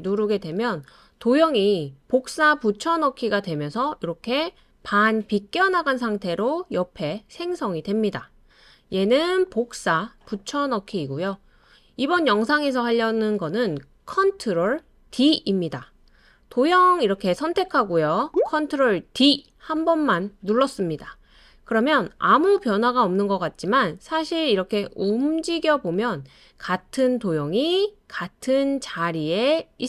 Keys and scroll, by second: 0.1 super+space, 19.0 super+d.